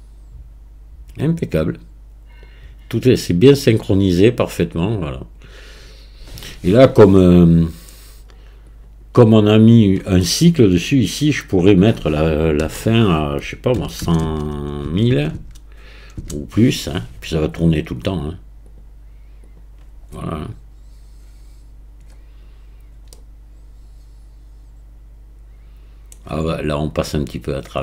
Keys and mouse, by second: 8.8 click, 11.5-18.7 drag, 14.3 KP_0, 15.1 KP_0, 19.5 click, 23.2-26.2 middle drag.